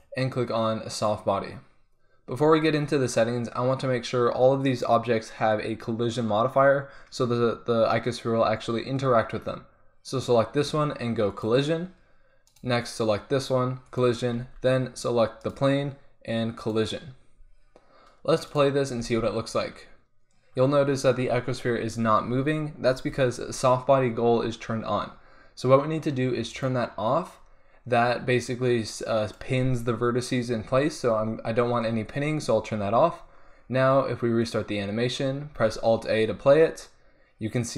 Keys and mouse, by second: 4.6-8.2 drag, 11.3-12.5 drag, 12.5-13.6 middle drag, 13.6 click, 13.9-14.4 middle drag, 14.4-15.4 drag, 14.4 z, 15.4 middle click, 15.7-16.5 drag, 17.3-17.7 drag, 19.1 alt+a, 23.0 alt+a, 26.5-31.1 drag, 34.4-37.7 drag, 35.6 alt+a.